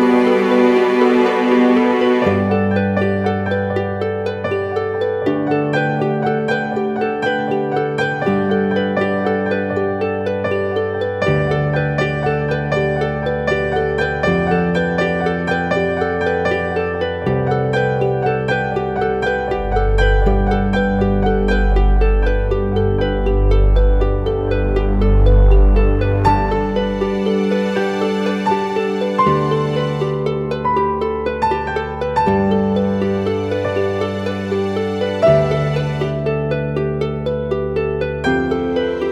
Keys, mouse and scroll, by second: 25.1-26.4 typing, 29.1 double click.